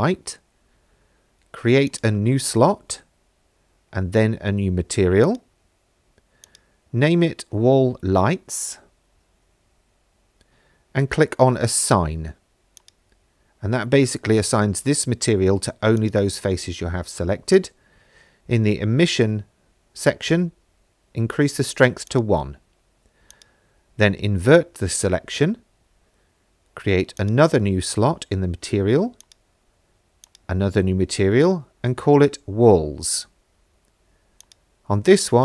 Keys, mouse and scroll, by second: 1.9 click, 5.3 click, 6.5-9.6 drag, 8.2 l, 12.8 click, 16.0 click, 16.7-17.5 scroll down 1, 17.5-18.8 drag, 22.1-23.4 drag, 27.2 click, 29.2 click, 30.2-32.8 drag, 31.6 l, 34.4 click.